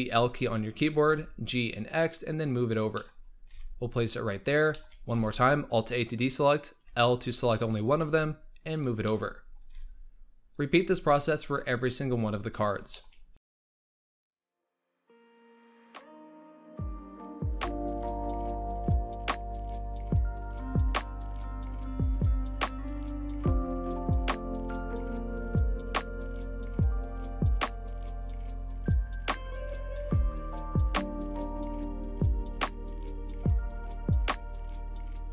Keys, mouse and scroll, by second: 0.9-2.1 scroll up 1, 2.1 g, 2.8 middle click, 3.1 scroll up 4, 3.4 g, 4.3 scroll down 5, 4.6 shift+middle click, 5.0 alt+a, 6.7 l, 7.4 shift+middle click, 7.7 g, 8.9 shift+middle click, 9.2-9.6 scroll up 5, 9.6 g, 10.7-11.8 scroll down 13, 11.8-12.8 scroll up 6, 12.8 shift+middle click, 13.0 scroll up 3, 13.3 alt+a, 13.4-33.5 typing, 13.4 shift+middle click, 13.5-13.8 scroll down 5, 13.6 shift+middle click, 13.8 shift+middle click, 13.9 alt+a, 13.9 shift+middle click, 14.0 scroll up 3, 14.3 scroll down 6, 14.4 shift+middle click, 14.4 alt+a, 14.5 shift+middle click, 14.6 shift+middle click, 14.6 scroll up 3, 14.7 shift+middle click, 14.8 scroll down 6, 14.9 shift+middle click, 14.9 alt+a, 15.0 shift+middle click, 15.1 shift+middle click, 15.3 scroll up 3, 15.4 scroll down 6, 15.5 shift+middle click, 15.5 alt+a, 15.7 shift+middle click, 15.8 scroll up 2, 15.9 shift+middle click, 16.1 scroll down 8, 16.1 shift+middle click, 16.2-16.5 scroll up 4, 16.2 alt+a, 16.4 shift+middle click, 16.5 shift+middle click, 16.8 scroll down 8, 16.9 shift+middle click, 17.0 alt+a, 17.1 shift+middle click, 17.1 shift+middle click, 17.2 scroll up 3, 17.3 shift+middle click, 17.5 scroll down 6, 17.6 shift+middle click, 17.6 alt+a, 17.8 shift+middle click, 17.9 scroll up 2, 18.1 scroll down 12, 18.2 shift+middle click, 18.2 scroll up 2, 18.3 alt+a, 18.3 ctrl+s, 18.7 shift+middle click, 18.7 alt+a, 18.8 scroll down 3, 18.9 shift+middle click, 19.1 shift+middle click, 19.1 scroll up 3, 19.3 scroll down 1, 19.3 shift+middle click, 19.4 alt+a, 19.5 shift+middle click, 19.6 shift+middle click, 19.7 shift+middle click, 19.9 scroll down 1, 20.0 shift+middle click, 20.1 scroll up 2, 20.2 shift+middle click, 20.3 shift+middle click, 20.5-21.5 scroll down 7, 20.5 shift+middle click, 20.6 alt+a, 21.0 shift+middle click, 21.1 shift+middle click, 21.4 alt+a, 21.5 scroll up 1, 21.8 scroll down 3, 21.8 shift+middle click, 21.8 alt+a, 21.9 shift+middle click, 22.0 scroll up 2, 22.1 shift+middle click, 22.2 shift+middle click, 22.6 shift+middle click, 22.6 alt+a, 22.7 shift+middle click, 22.8 scroll up 4, 22.9 shift+middle click, 23.0 shift+middle click, 23.3 scroll down 7, 23.4 alt+a, 23.5 shift+middle click, 23.6 scroll up 5, 24.0 shift+middle click, 24.0 alt+a, 24.3 shift+middle click, 24.3 scroll up 5, 24.3 shift+middle click, 24.6 scroll down 8, 24.7 alt+a, 24.9 shift+middle click, 25.0 scroll up 1, 25.0 shift+middle click, 25.4 scroll down 9, 25.4 shift+middle click, 25.4 alt+a, 25.6 shift+middle click, 25.6 middle click, 25.8 scroll up 4, 25.9 middle click, 26.0 shift+middle click, 26.3 scroll down 10, 26.3 shift+middle click, 26.4 alt+a, 26.6 middle click, 26.7 scroll up 6, 26.8 middle click, 26.9 middle click, 27.2 scroll down 9, 27.2 shift+middle click, 27.3 alt+a, 27.5 middle click, 27.6 scroll up 1, 27.6 middle click, 27.9 shift+middle click, 28.0 alt+a, 28.2 middle click, 28.3 scroll up 3, 28.3 middle click, 28.4 middle click, 28.8-29.2 scroll down 2, 28.9 middle click, 29.0 alt+a, 29.1 middle click, 29.2 middle click, 29.3 scroll up 1, 29.4 middle click, 29.8 scroll down 1, 29.8 middle click, 29.9 scroll up 2, 29.9 alt+a, 30.0 shift+middle click, 30.2 shift+middle click, 30.3 scroll down 2, 30.4 shift+middle click, 30.4 alt+a, 30.6 scroll up 1, 30.7 middle click, 30.9 shift+middle click, 31.0 alt+a, 31.2 scroll down 1, 31.2 scroll up 1, 31.3 middle click, 31.5 scroll down 5, 31.7 middle click, 31.7 alt+a, 31.9 middle click, 32.0 scroll up 1, 32.0 middle click, 32.2 scroll down 3, 32.2 middle click, 32.3 alt+a, 32.5 scroll up 2, 32.5 middle click, 33.1 scroll down 1, 33.2 middle click, 33.2 alt+a, 33.3 middle click, 33.4 middle click, 33.5 scroll up 1.